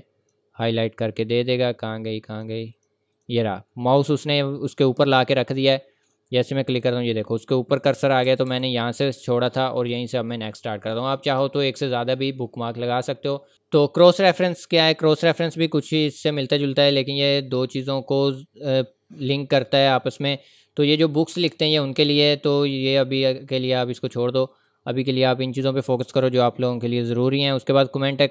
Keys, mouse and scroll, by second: 0.6 scroll down 1, 1.0-1.3 scroll up 1, 1.3-2.3 scroll down 1, 2.3 click, 8.0 Left, 9.3 click, 13.5-14.1 scroll up 1, 17.2 click, 26.9 click, 27.0-27.3 scroll down 1, 27.8 click.